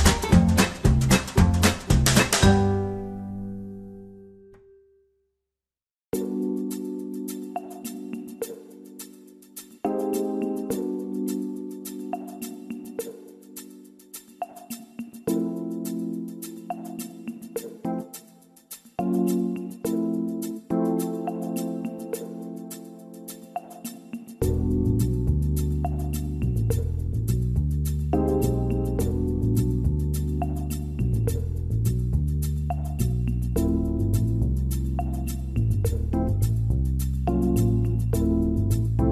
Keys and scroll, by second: 37.5 r, 38.5 alt+r.